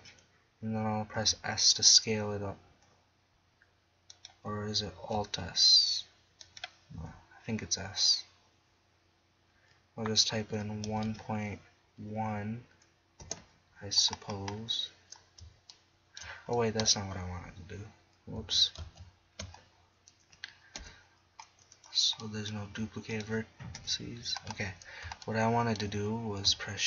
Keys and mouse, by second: 1.3 s, 4.3-5.0 drag, 5.0 alt+s, 7.0 s, 14.1 middle click, 18.4 ctrl+z, 18.8 ctrl+z, 20.8 KP_1, 22.7 g, 23.8 KP_1.